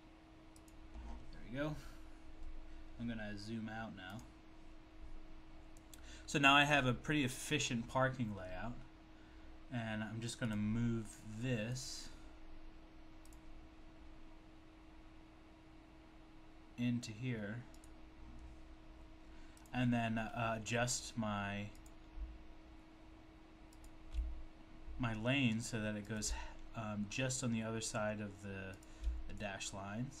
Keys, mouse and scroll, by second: 0.6 click, 4.2 click, 10.4 click, 13.3 click, 13.3 click, 17.8 click, 19.6 click, 22.1 click, 23.8 shift+click, 29.1 shift+click.